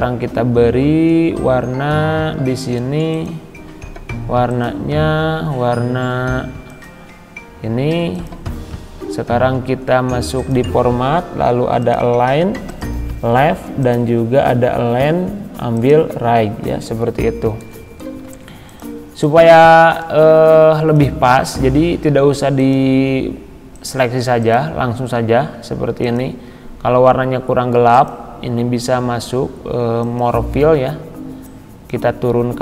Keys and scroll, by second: 18.3 ctrl+z.